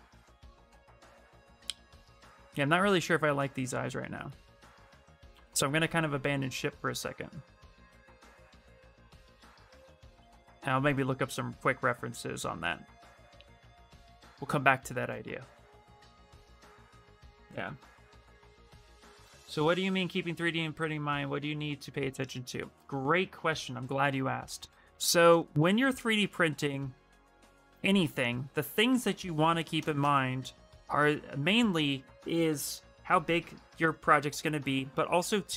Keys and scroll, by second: 4.7 shift+f, 5.1 shift+f, 26.8 f, 29.1 q.